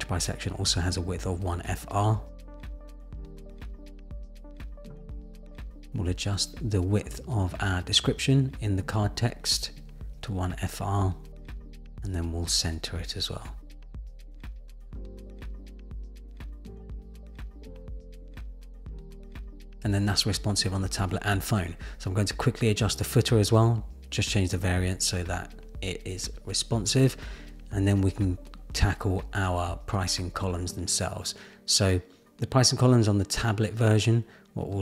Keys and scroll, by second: 0.8 Return, 12.2 Return, 28.5 super+=.